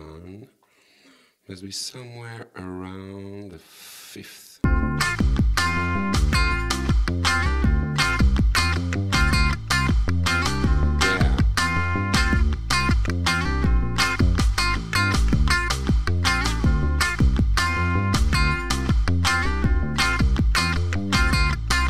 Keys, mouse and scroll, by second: 3.6 click, 4.7 space, 19.4 right click, 20.4 click, 20.7 click, 21.1 right click.